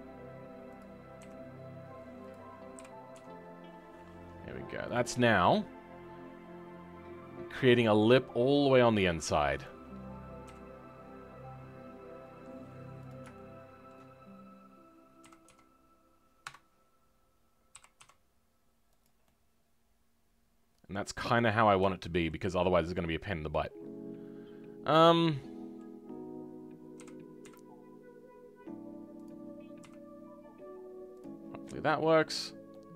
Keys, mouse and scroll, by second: 5.1-5.4 scroll down 4, 5.4-9.6 middle drag, 9.6 click, 10.4 s, 13.3-15.2 shift+middle drag, 15.2 s, 19.2-21.5 middle drag, 21.5-21.8 scroll up 3, 21.8-23.0 shift+middle drag, 23.0 click, 23.2-27.0 middle drag, 27.0 r, 29.8 s, 31.4 scroll down 3, 31.6 middle click, 32.4-32.7 scroll down 3, 32.7-32.9 middle drag.